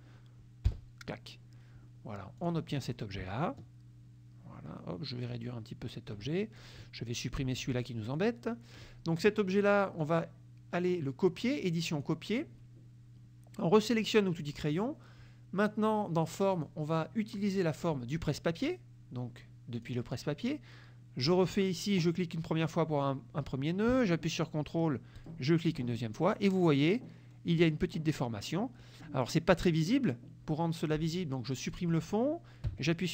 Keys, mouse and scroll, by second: 0.8 Delete, 2.5 click, 3.7-6.4 ctrl+drag, 6.6 ctrl+click, 7.6 Delete, 8.2 click, 10.1 click, 12.0 click, 14.5 click, 16.6 click, 19.9 click, 21.4 click, 25.2 ctrl+click, 31.6 click.